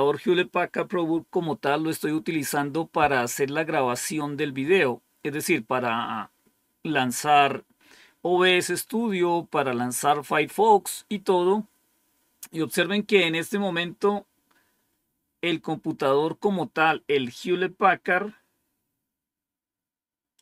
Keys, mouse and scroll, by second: 20.3 click.